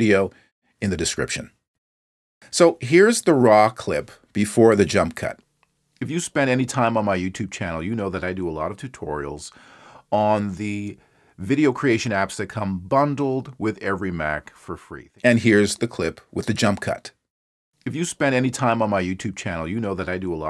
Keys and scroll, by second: 5.2 space.